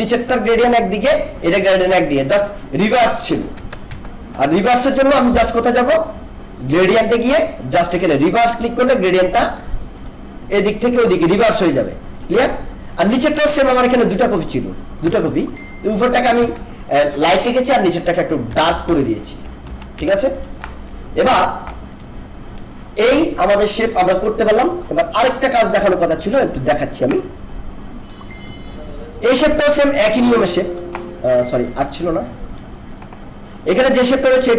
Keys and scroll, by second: 3.6 ctrl+z, 15.0 ctrl+z, 16.4 ctrl+z, 18.5 ctrl+-, 19.6 ctrl+=, 21.3 ctrl+-.